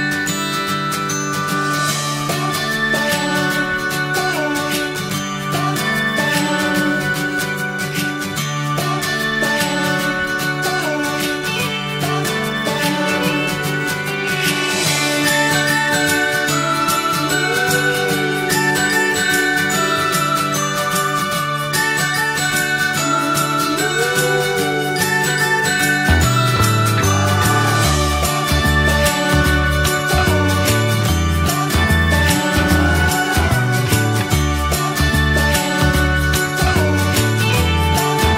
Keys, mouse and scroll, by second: 0.5 scroll down 1, 0.6-3.1 middle drag, 3.1 click, 3.3 Tab, 3.7 click, 4.4-5.5 alt+middle drag, 6.0 click, 6.3 shift+middle click, 7.1 r, 9.7 click, 10.1 click, 11.1 click, 11.5 click, 11.9 click, 12.7 click, 13.3 click, 13.8 click, 14.2 click, 15.2 middle click, 15.6 Tab, 16.0-17.2 middle drag, 17.3 shift+middle click, 18.1-21.0 drag, 21.1-22.9 middle drag, 22.9 Tab, 23.3-24.3 middle drag, 24.3 alt+z, 24.6 middle click, 24.9-25.5 scroll up 2, 25.8 click, 27.1 ctrl+a, 29.8 click, 30.1 middle click, 31.1 ctrl+a.